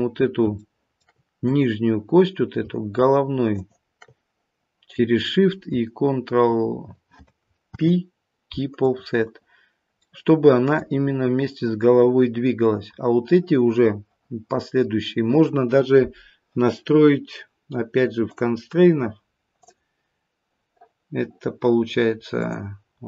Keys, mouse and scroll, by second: 0.1 scroll up 1, 0.6 shift+middle click, 1.4 click, 3.5 shift+click, 7.6 ctrl+p, 10.0 middle click, 18.2 click, 19.6 click.